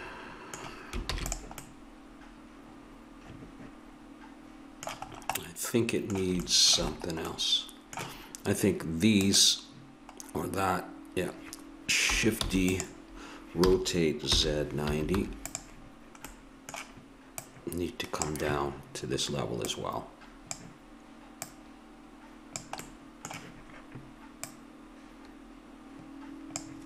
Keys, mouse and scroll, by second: 1.1 ctrl+s, 7.0 click, 9.3-11.0 drag, 12.4 shift+d, 13.6 r, 17.4-19.1 drag, 19.6-23.2 drag, 22.8-26.0 middle drag, 24.4-26.3 drag.